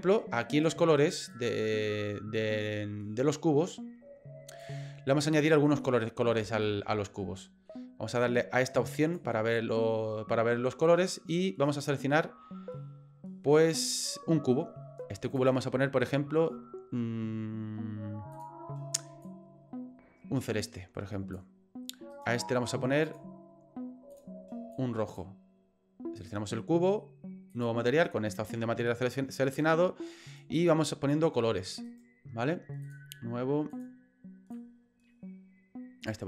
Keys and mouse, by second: 1.3-4.6 drag, 5.8 middle click, 6.7 shift+middle click, 7.4 middle click, 9.4-11.7 drag, 11.7 right click, 15.3 click, 18.4 click, 22.2 right click, 23.1 click, 24.1 click, 26.2 right click, 27.5 click, 31.9 right click, 32.8 click, 33.7 click.